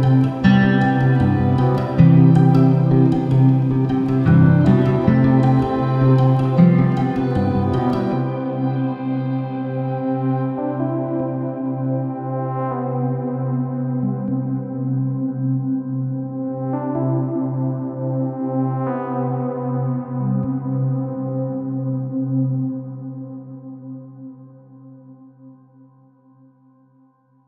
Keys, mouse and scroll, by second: 0.2 Return, 0.8-1.2 scroll up 1, 1.2 r, 1.9 Return, 2.4-5.1 typing, 6.8 click, 8.4 g, 10.7 click, 11.0 s, 13.9 click, 15.2 s, 17.2 click, 17.6 Tab, 17.7-18.1 scroll up 1, 18.1 1, 18.4-20.3 drag, 19.1 g, 19.8 Escape, 20.0 shift+z, 20.5 click, 21.0 g, 22.4 click, 23.7 g, 24.3 click, 24.6 Tab, 24.9-27.4 middle drag, 25.3-25.9 scroll down 1, 25.9 KP_7, 26.4 g.